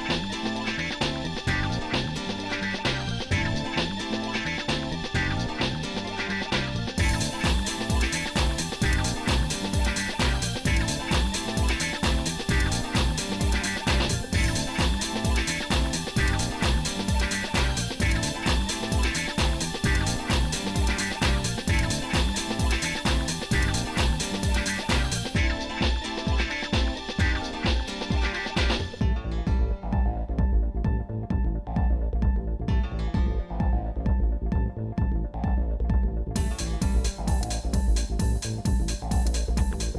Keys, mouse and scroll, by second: 11.2 click, 12.0 click, 13.5-14.6 drag, 15.2 click, 27.3 click, 32.7 shift+middle click, 33.3 shift+middle click, 34.4 g.